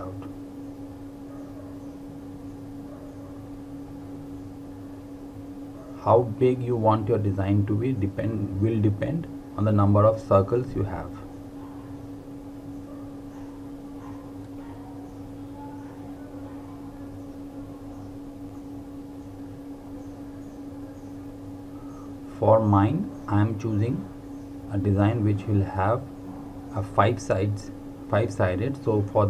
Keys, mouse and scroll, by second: 1.1-2.8 typing, 4.5 typing, 6.3 click, 11.2 typing, 12.7 alt+Num_Lock, 12.8 alt+click, 15.8-17.6 typing, 20.3 v, 21.0 click, 22.8 r, 24.0 click, 24.3 click, 24.6-25.0 typing, 26.9 v, 27.4 click, 28.9 r.